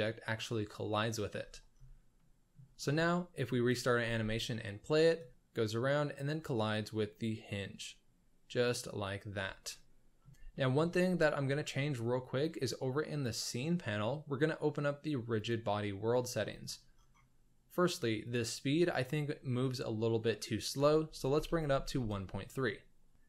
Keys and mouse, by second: 2.1-2.5 middle drag, 2.8 shift+middle drag, 3.7 drag, 4.0 space, 5.0 middle click, 9.7-10.2 shift+middle drag, 10.2 shift+space, 10.5 shift+middle drag, 10.5 shift+space, 13.2 click, 15.3 click, 18.2-22.0 drag.